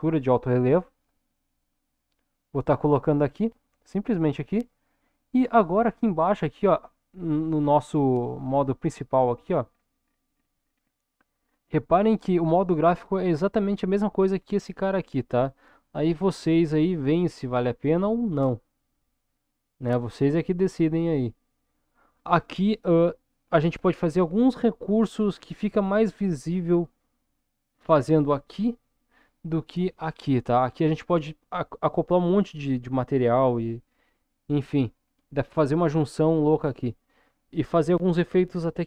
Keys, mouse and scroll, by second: 5.8 middle click, 7.8 middle click, 9.7-14.1 scroll down 7.